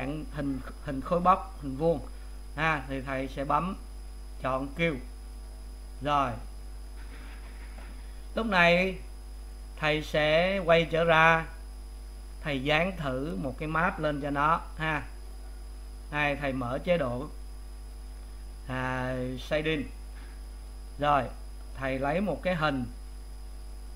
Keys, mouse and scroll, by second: 5.5 u, 10.1 click, 12.2 Tab, 13.1 click, 15.8 click.